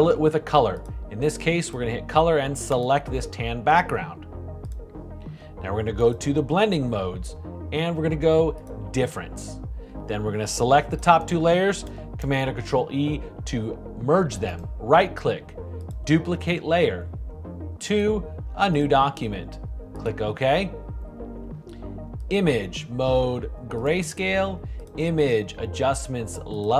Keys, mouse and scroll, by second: 0.0 shift+BackSpace, 12.0 super+e.